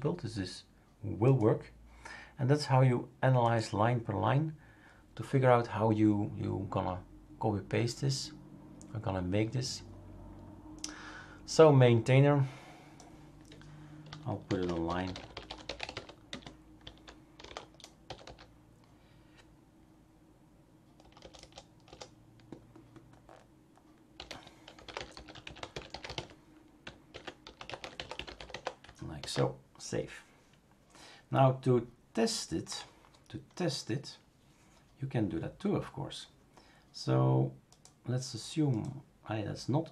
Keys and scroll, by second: 14.2-18.7 typing, 21.0 BackSpace, 21.2 BackSpace, 21.4 BackSpace, 21.9 BackSpace, 24.2-28.5 typing, 29.2 ctrl+s.